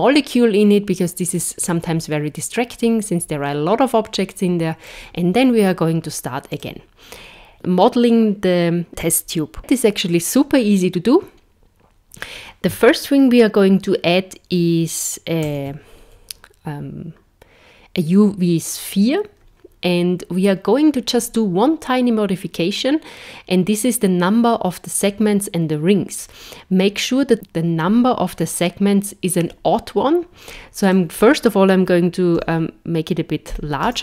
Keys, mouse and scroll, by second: 1.3 click, 2.8 click, 4.9 click, 6.5 click, 15.5 shift+a, 30.5 click.